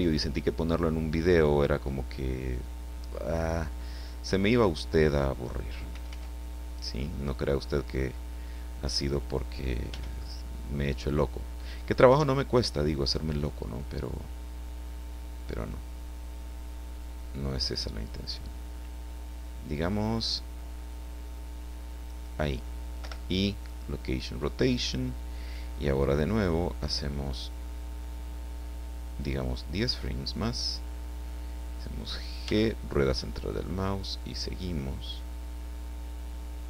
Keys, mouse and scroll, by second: 5.9 r, 9.0 click, 9.9 g, 10.0 click, 22.1 click, 23.0 i, 23.6 click, 29.2 click, 32.4 g, 32.8 middle click.